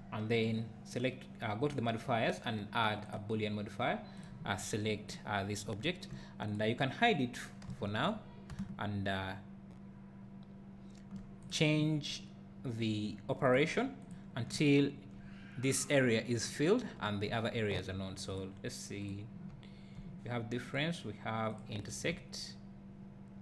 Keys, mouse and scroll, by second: 3.1-4.4 drag, 6.6 click, 7.7 h, 8.6 `, 10.1 `, 11.5 click, 14.3-23.4 drag, 14.6 `, 19.5 `, 22.1 `.